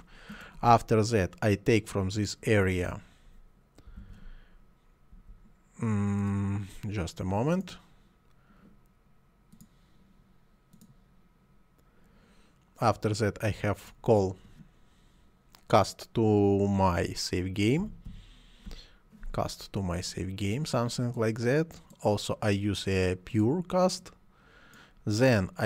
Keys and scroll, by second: 0.0-0.5 typing, 3.6-5.1 typing, 17.8 m, 18.1 y.